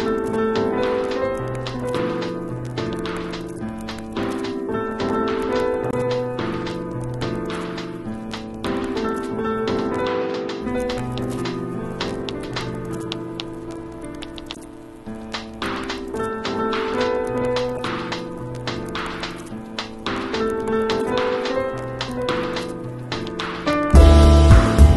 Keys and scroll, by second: 11.0 b, 15.7 0, 16.3 [, 19.2 [, 20.3 ], 22.9 ], 24.6 x.